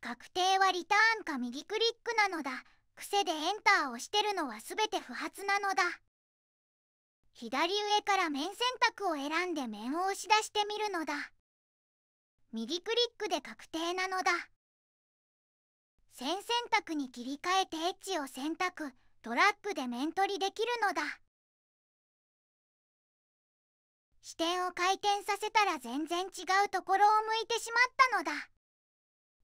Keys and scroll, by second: 0.0 Tab, 0.8 Return, 3.0 Return, 6.5 Escape.